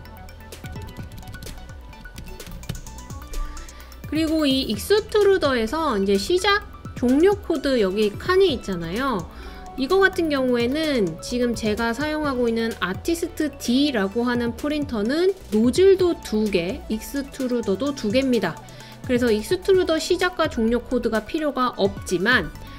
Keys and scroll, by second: 0.4-3.2 typing.